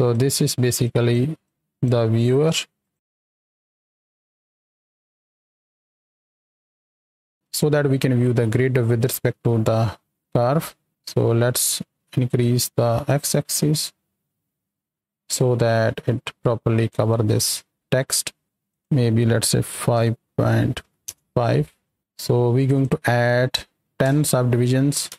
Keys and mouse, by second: 0.1 click, 0.8 click, 1.4 click, 2.2 click, 2.8 click, 3.9 F2, 4.3 click, 4.8 ctrl+j, 5.0 click, 5.7 F2, 10.0 shift+click, 12.5-15.3 shift+drag, 15.7 z, 18.6-21.1 drag, 22.6-25.1 drag.